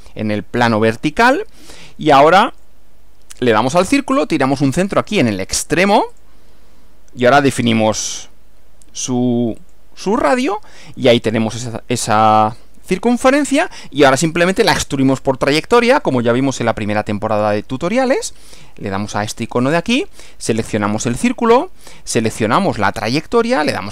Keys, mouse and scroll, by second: 2.6 click, 6.3 click, 9.7 click, 16.0 click, 17.4 click, 19.2 click, 20.9 click, 21.5 click, 22.9 click.